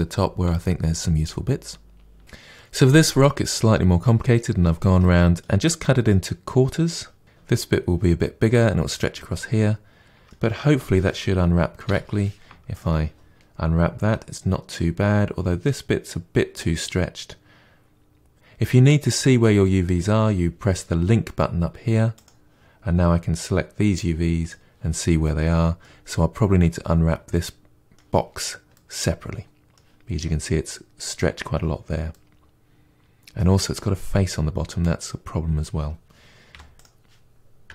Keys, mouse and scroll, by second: 0.0 click, 0.1 shift+click, 0.2 middle click, 0.3 shift+click, 0.8 ctrl+e, 0.8 middle click, 1.0 click, 1.2 shift+click, 1.3 middle click, 1.6 shift+click, 1.6 middle click, 1.8 shift+click, 2.0 ctrl+e, 2.2-10.6 middle drag, 10.6 a, 12.7 u, 24.4 click, 25.2-36.5 middle drag, 36.5 3, 36.8 click.